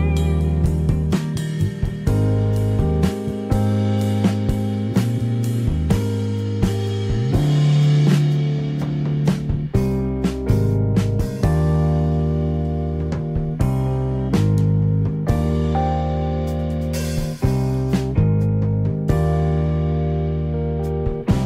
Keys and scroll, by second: 1.7 Escape, 7.0 Escape, 10.9 Escape.